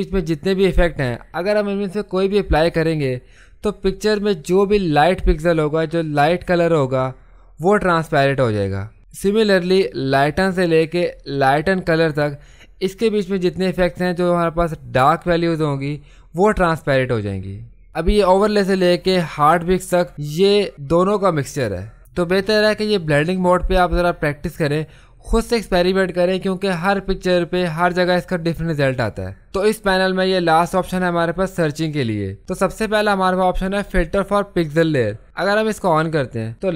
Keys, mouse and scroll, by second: 35.8 click.